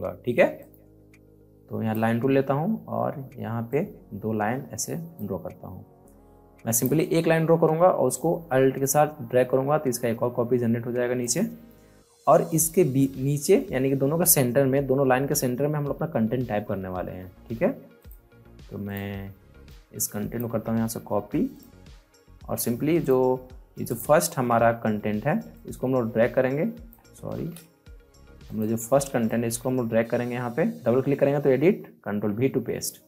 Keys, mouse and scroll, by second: 0.5 click, 0.6-3.7 drag, 3.7-6.7 shift+drag, 8.8-13.8 alt+drag, 17.9-21.0 drag, 21.0 c, 21.4 click, 25.6-27.3 alt+drag, 27.3 z, 28.4 click, 29.3-30.7 ctrl+drag, 32.0 ctrl+v.